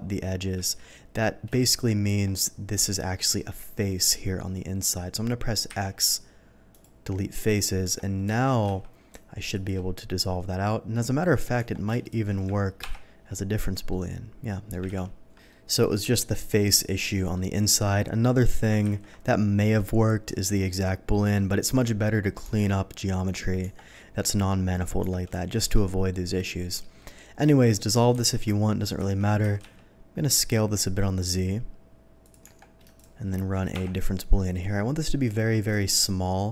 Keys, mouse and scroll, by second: 0.7 ctrl+x, 1.5 shift+middle click, 2.0 Tab, 2.8 z, 3.2 middle click, 4.4 middle click, 5.6 x, 6.7 click, 7.8 Tab, 8.2 alt+a, 8.6 z, 9.5 click, 11.2 alt+middle click, 11.5 Tab, 12.0 click, 12.8 ctrl+KP_Subtract, 13.8-14.7 middle drag, 14.8 ctrl+z, 15.5 middle click, 16.5 middle click, 17.1 middle click, 18.9 ctrl+z, 20.6-21.1 middle drag, 21.3-21.9 middle drag, 22.4 Tab, 25.5 alt+click, 26.1 middle click, 26.6 middle click, 26.9 alt+middle click, 28.1 ctrl+x, 28.9 a, 29.4 s, 29.6 z, 32.2 click, 32.4 Tab, 32.9 click, 34.1 ctrl+KP_Subtract, 34.3-35.3 middle drag, 35.6 click.